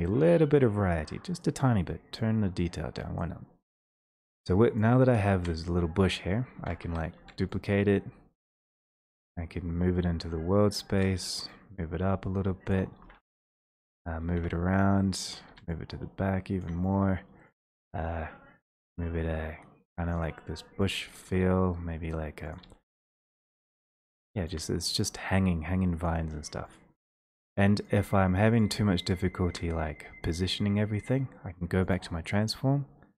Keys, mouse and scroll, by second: 1.4 click, 6.6 d, 6.8 Escape, 6.8 i, 8.9 shift+click, 12.7 click, 13.1 d, 14.2 right click, 14.4 d, 15.4 right click, 15.5 w, 17.5 right click, 17.8 d, 20.3 shift+click, 20.9 click, 21.4 d, 22.6 click, 22.9 w, 24.5 shift+click, 26.3 click, 26.8 shift+click, 27.4 shift+click, 31.9 click.